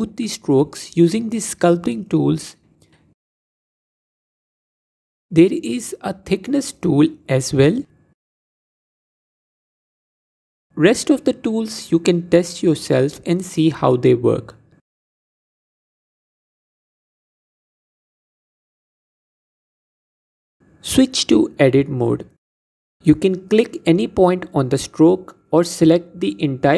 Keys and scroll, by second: 14.1 f, 17.5 f, 21.2 Tab.